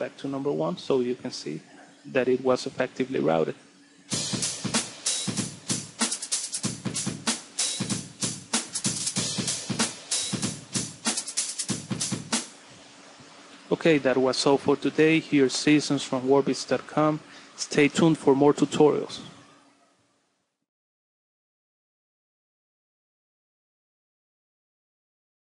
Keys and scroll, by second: 13.1 space.